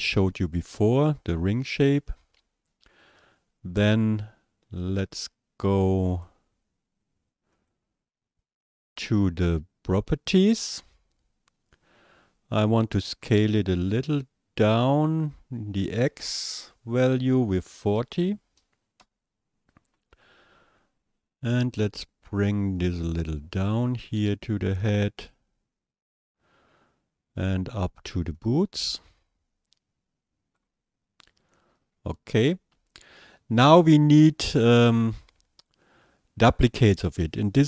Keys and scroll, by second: 17.8 KP_4, 18.0 KP_0, 19.0 Return.